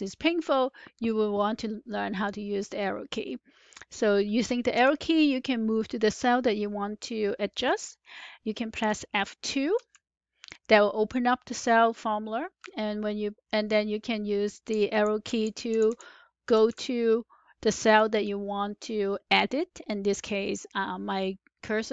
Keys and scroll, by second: 4.7 Down, 9.7 Up, 9.7 F2, 14.6 Left, 15.2 Left, 15.6 Left, 16.4 Right, 16.6 Right.